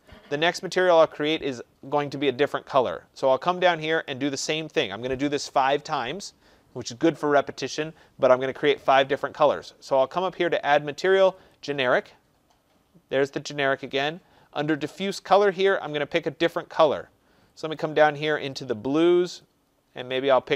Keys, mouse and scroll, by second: 0.0 click, 4.2 click, 11.5 click, 15.6 click, 17.7 click, 19.4 click, 20.1 click.